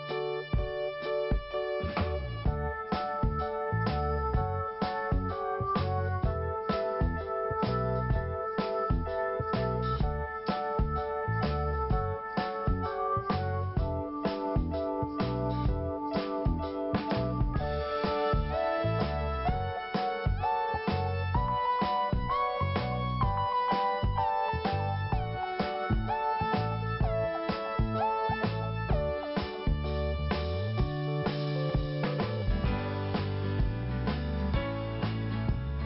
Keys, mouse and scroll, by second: 1.5 click, 1.6 click, 1.7 click, 1.8 double click, 4.0 click, 6.9 click, 7.0 click, 7.9 click, 8.6 click, 10.9 p, 11.9 click, 11.9 click, 12.4 click, 12.5 click, 13.8 click, 14.6 click, 14.7 click, 15.8 click, 15.9 click, 16.3 click, 17.9 click, 18.0 click, 18.8 p, 19.9 click, 21.9 click, 24.0 click, 26.1 click, 29.1 click, 30.5 l, 32.1 right click, 33.0 click, 34.1 right click, 34.7 click.